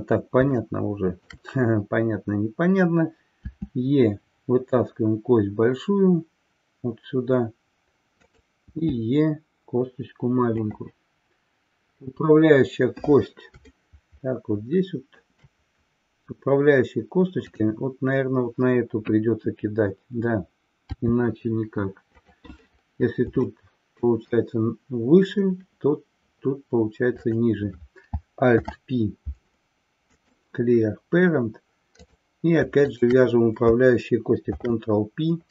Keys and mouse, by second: 0.5 shift+middle click, 10.7 click, 13.8-15.3 shift+middle drag, 17.4 click, 22.3 click, 23.5 middle click, 27.1 click, 28.5 alt+p, 31.9 click, 32.9 shift+click, 34.5 ctrl+p.